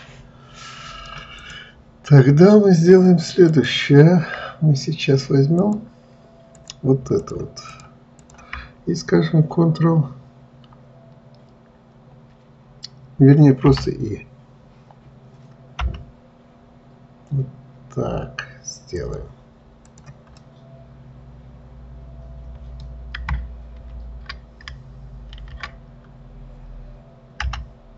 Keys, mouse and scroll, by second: 1.7 click, 3.9 click, 5.9 click, 6.9 click, 7.5 shift+click, 8.0 shift+click, 8.6 shift+click, 20.1 click, 20.7-23.8 middle drag, 25.6 ctrl+z.